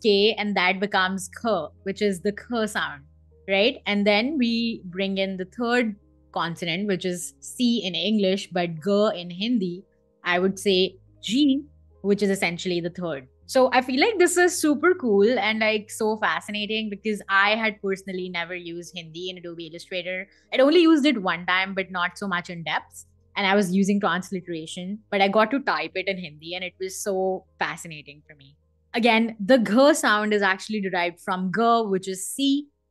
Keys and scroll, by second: 1.3 Escape, 11.0 g, 11.9 Escape.